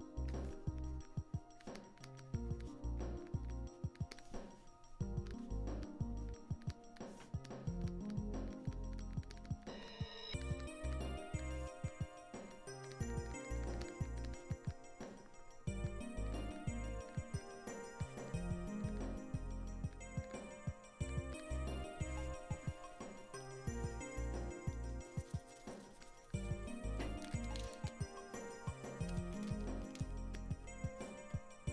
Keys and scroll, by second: 15.3 ctrl+z, 19.7 ctrl+z.